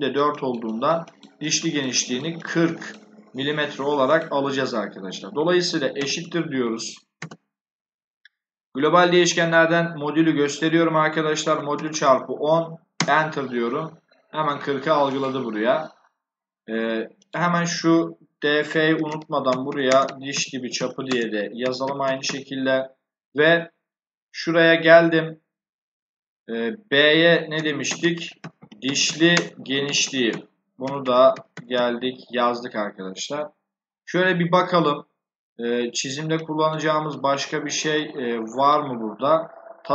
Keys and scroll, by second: 5.9 shift+0, 7.2 BackSpace, 11.1-12.3 typing, 12.9 Return, 18.8-22.6 typing, 27.5-32.1 typing.